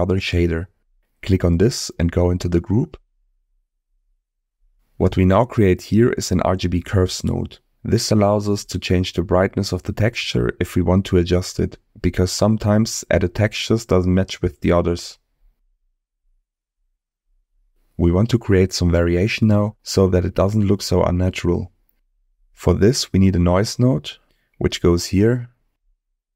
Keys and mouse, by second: 1.9 click, 3.7 middle click, 6.5 middle click, 8.8 shift+a, 14.0-14.9 drag, 15.3 click, 16.1 click, 16.8 click, 17.5 click, 18.2 click, 19.0 click, 19.7 click, 20.4 click, 21.7 shift+a.